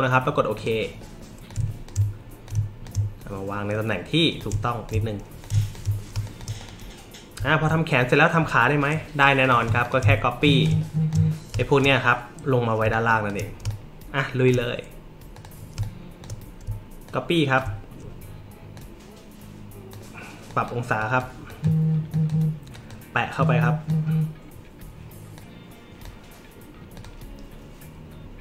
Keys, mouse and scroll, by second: 0.5 click, 1.5-1.8 shift+drag, 2.4-2.8 shift+drag, 4.4 shift+click, 5.4 shift+click, 6.1 space, 6.2 click, 6.6 click, 7.5 alt+middle click, 9.4 click, 9.8 shift+click, 10.2 alt+middle click, 10.6 click, 11.5 space, 11.6 click, 12.8 space, 12.9 click, 13.6 space, 13.7 click, 15.3 click, 15.7 space, 15.8-16.2 drag, 17.0 alt+click, 18.7-19.9 drag, 20.5 drag, 20.9 drag, 21.4 click, 22.1 click, 22.7 click, 23.4 click, 25.3 click, 26.9 click.